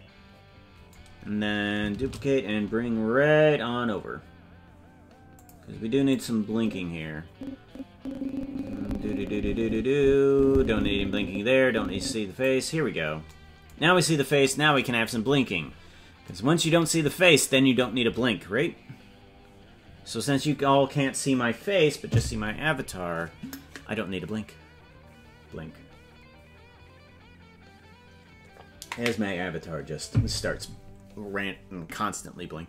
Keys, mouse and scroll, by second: 2.0 shift+d, 6.1-12.4 drag, 12.7-13.2 scroll up 9, 14.2-14.7 scroll up 4, 15.5-16.2 scroll up 5, 16.9-17.3 scroll up 3.